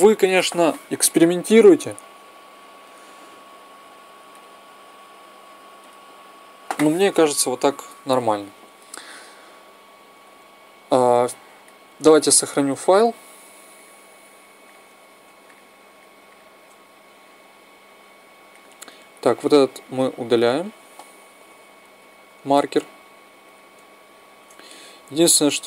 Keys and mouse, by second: 8.2 Escape, 12.5 middle click, 19.9-21.1 drag, 21.2 x, 23.0-24.3 drag.